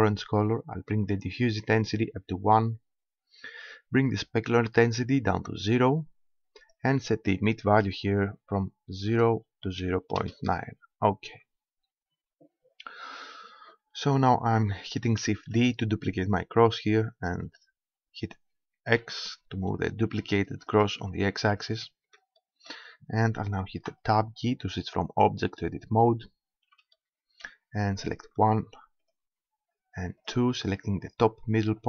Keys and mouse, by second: 1.1-2.8 drag, 4.0-5.8 drag, 6.6-8.4 drag, 8.6-10.2 middle drag, 11.0-13.2 middle drag, 15.6 shift+d, 20.8-22.6 drag, 22.6-23.8 middle drag, 23.8 Tab, 28.1-31.8 drag.